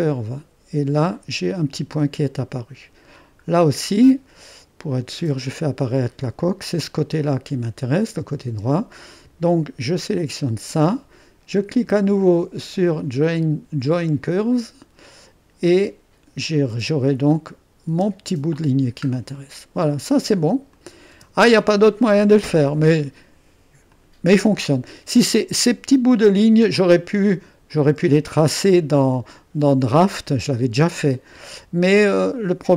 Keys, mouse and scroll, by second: 0.0 click, 1.2-2.5 scroll up 1, 2.5-3.3 scroll down 6, 2.6 middle click, 3.5-4.3 scroll up 2, 4.9-6.0 drag, 5.4 space, 8.4 space, 10.2-13.4 drag, 14.3-16.0 drag, 17.7 click, 18.0 space, 18.7-19.4 scroll down 1, 19.4-20.7 middle drag, 20.8-21.8 drag, 21.2 space, 22.4-22.9 scroll down 1, 22.7 typing, 23.9 click, 23.9 typing, 26.4 space, 27.7 click, 28.1 space, 29.4-31.0 middle drag.